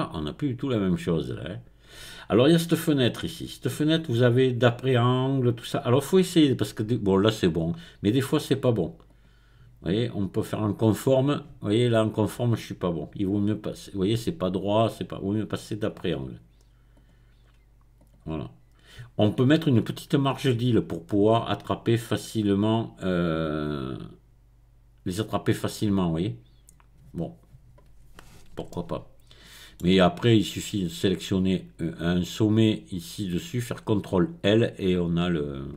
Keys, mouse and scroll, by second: 1.0-2.4 drag, 2.8 click, 9.1 click, 10.4 click, 15.9 click, 17.0 click, 18.0 click, 23.1-25.9 drag, 28.7-30.2 shift+middle drag, 30.2-31.4 scroll up 1, 35.2-35.7 scroll down 1.